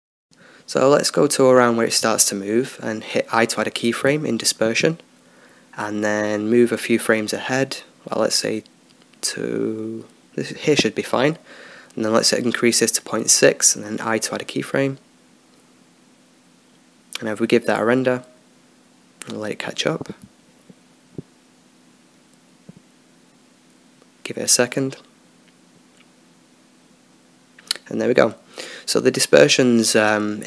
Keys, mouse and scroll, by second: 0.7 Left, 1.1 Left, 1.3 Left, 1.6 Left, 1.9 Left, 2.3 Left, 2.7 Right, 2.8 Left, 3.0 Left, 3.2 Left, 3.6 Left, 4.2 Right, 6.0 i, 8.1-9.7 drag, 11.2-12.7 drag, 17.0 i.